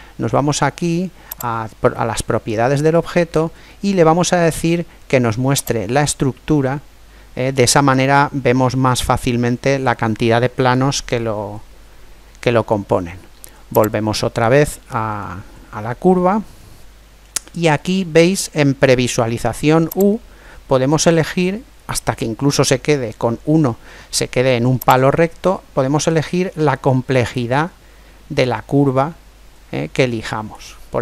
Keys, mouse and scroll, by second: 1.3 click, 3.0-5.6 middle drag, 5.6 click, 7.6-9.6 middle drag, 13.7-15.5 drag, 15.2-17.1 middle drag, 20.0 click, 24.9 click, 26.7 click.